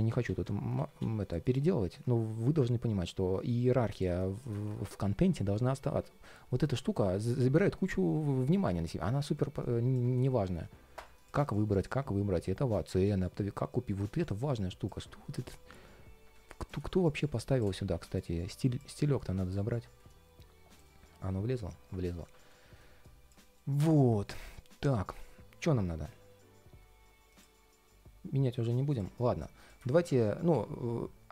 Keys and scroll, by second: 17.6 super+v, 18.1 alt+super+c, 18.7 alt+super+v, 20.7 ctrl+shift+4, 22.1 ctrl+shift+3, 22.4 ctrl+shift+4, 23.2 ctrl+shift+4, 24.3 ctrl+shift+3.